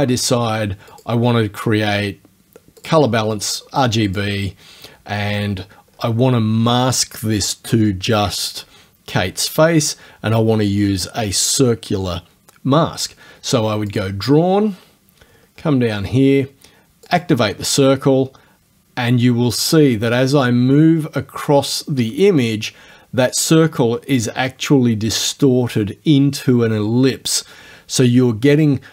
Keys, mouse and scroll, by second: 0.9 click, 2.8 click, 4.2 click, 5.9-6.2 scroll down 1, 13.9 click, 15.2-15.9 scroll down 1, 17.1 click.